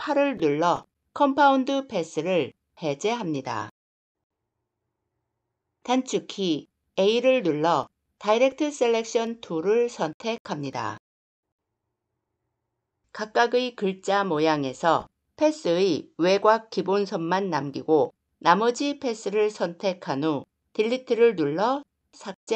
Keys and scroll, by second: 6.7 a, 20.6 Delete.